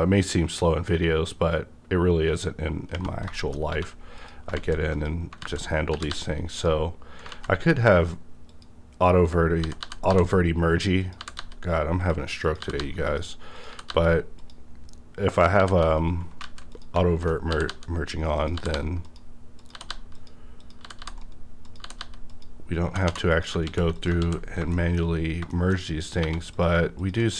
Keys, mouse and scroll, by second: 2.9 space, 2.9 b, 3.3 middle click, 3.6 scroll up 1, 3.7 1, 4.2 click, 4.5 alt+z, 4.9 alt+click, 5.4 alt+z, 5.9 g, 6.1 g, 6.6 click, 7.3 ctrl+z, 8.5 click, 9.6-11.4 typing, 11.0 click, 12.0 click, 12.6 g, 12.8 g, 13.1 click, 13.6 click, 13.7 g, 13.9 g, 14.4 click, 15.3 click, 15.6 g, 15.8 g, 15.9 right click, 16.4 alt+z, 16.7 click, 17.0 alt+z, 17.5-22.9 typing, 18.4 click, 19.0 click, 19.6 click, 20.1 click, 21.2 right click, 21.6 click, 22.3 click, 23.3 click, 23.6 ctrl+x, 23.9 ctrl+click, 24.2 ctrl+x, 24.5-25.2 scroll down 2, 24.7 shift+middle click, 25.0 shift+middle click, 25.2 scroll up 1, 25.5 shift+middle click, 25.5 shift+scroll down 1, 26.2 1, 26.5 click, 26.5 click, 27.0 shift+click.